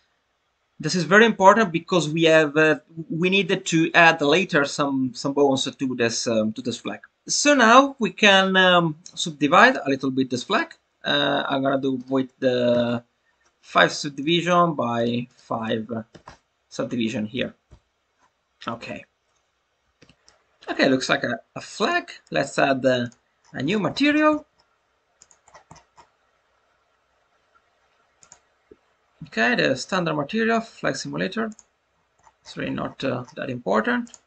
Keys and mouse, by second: 8.2 Tab, 9.5 click, 10.4 click, 12.1-13.4 drag, 14.1 click, 14.9 click, 15.3-17.0 drag, 17.3 Tab, 17.6 Tab, 20.1 Tab, 20.1 middle click, 23.0 drag, 28.1-31.6 drag.